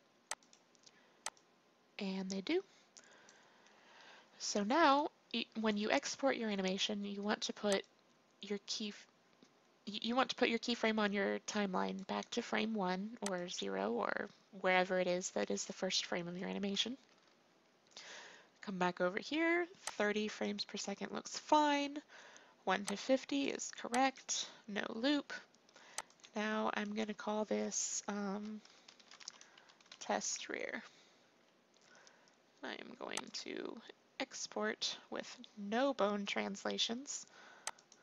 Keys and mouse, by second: 7.8-9.5 drag, 13.3-38.0 drag.